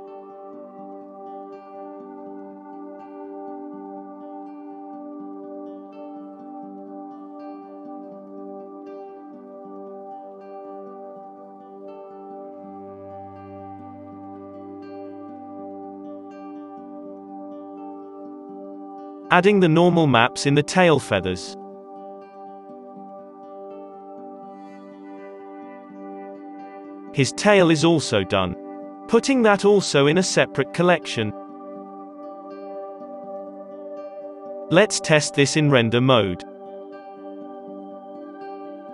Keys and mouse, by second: 0.0-1.8 typing, 0.9-2.6 drag, 3.0 b, 3.8 z, 5.1 ctrl+z, 5.1-7.0 drag, 5.9 ctrl+l, 7.1 alt+a, 7.5-9.2 drag, 8.5 Delete, 9.0 ctrl+z, 11.0-15.6 drag, 11.0 r, 11.5 alt+a, 12.9 r, 13.3 alt+a, 14.2 r, 15.2 alt+a, 15.6-17.9 middle drag, 17.1 b, 17.7 g, 17.9-19.5 middle drag, 19.5 click, 20.2 n, 20.4 z, 21.2 alt+a, 21.2-25.5 drag, 21.6 shift+d, 23.4 shift+a, 25.7-28.7 middle drag, 28.7 h, 28.7 b, 28.7 z, 28.8 m, 30.3 Return, 32.2-34.2 drag, 34.2 right click, 34.3-35.4 middle drag, 35.4 alt+a, 35.4-37.1 drag, 37.1 z, 38.4-38.9 drag.